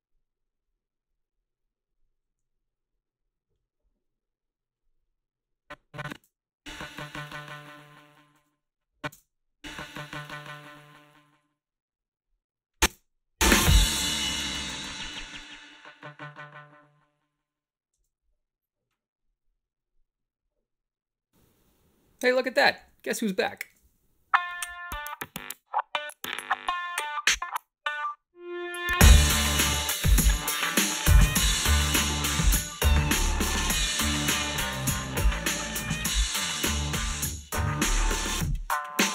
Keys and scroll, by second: 6.1 space, 8.4 space, 9.1 space, 12.9 space, 17.9 space, 22.6 shift+z, 23.2 Home, 23.7 space.